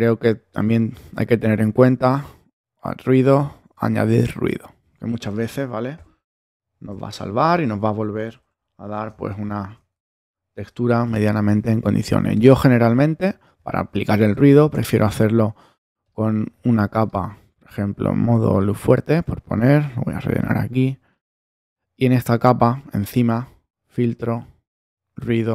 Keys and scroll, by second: 5.9 alt+super+´, 6.9 alt+super++, 8.1 alt+super++, 9.0 super+space, 10.1 super+-.